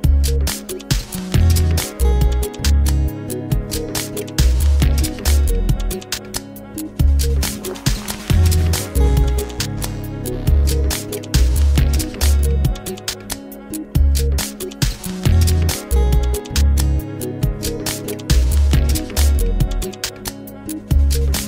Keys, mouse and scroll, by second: 2.5 Tab, 3.2-10.5 middle drag, 10.6 click, 13.4-16.6 middle drag, 16.6 r, 19.9 click.